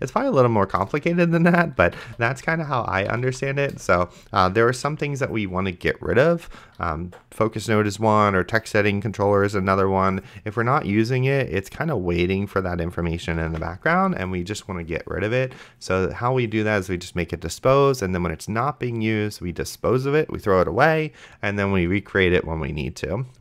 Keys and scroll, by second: 0.0-0.2 typing, 0.8 Return, 1.8-4.8 typing, 13.8 ctrl+s.